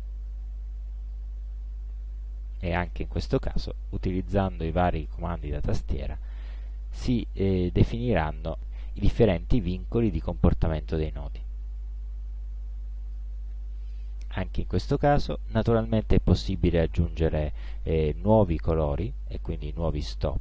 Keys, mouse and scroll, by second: 3.8-13.4 shift+drag, 14.1-15.4 drag, 18.7-20.2 drag.